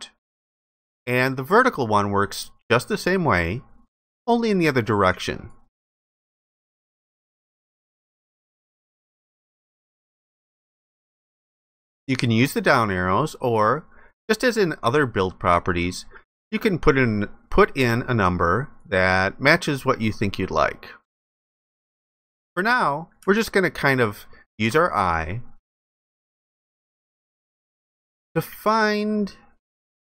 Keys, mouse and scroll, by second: 23.3 alt+click.